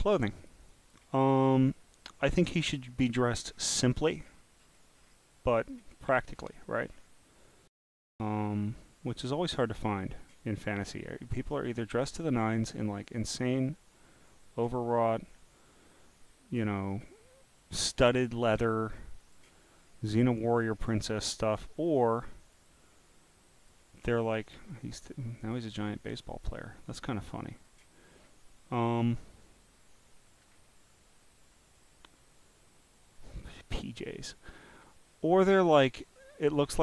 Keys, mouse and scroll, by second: 0.2 click, 0.7 click, 2.7-5.1 scroll down 26, 4.6 right click, 5.6 click, 6.0 scroll down 1, 6.1 scroll down 1, 6.3 scroll down 1, 6.4 scroll, 6.9 scroll down 1, 9.7 click, 11.8 click, 13.0-14.3 drag, 14.9 scroll down 1, 15.0 scroll, 15.0 scroll, 15.4 scroll, 16.6 click, 19.2 click, 19.8 scroll, 19.8 scroll, 19.9 scroll, 19.9 scroll, 20.6 scroll, 20.6 scroll, 20.7 scroll, 20.7 scroll, 21.8-22.3 scroll down 1, 22.5 click, 23.4 click, 24.7 click, 27.5 click, 28.1 scroll down 6, 30.3 scroll down 3, 31.7 click, 33.1 click, 35.1 scroll down 1, 35.1 scroll down 1, 35.2 scroll down 1, 36.1 scroll down 1, 36.1 scroll down 1, 36.2 scroll down 1.